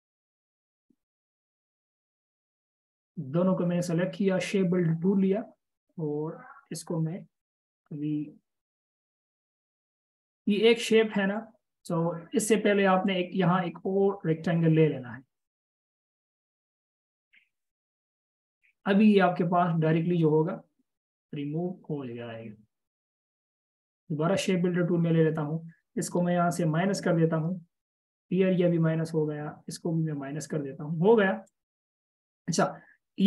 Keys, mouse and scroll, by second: 2.3 double click, 10.3 ctrl+z, 12.1 double click, 26.9 alt+click, 29.9 alt+click, 31.9 double click.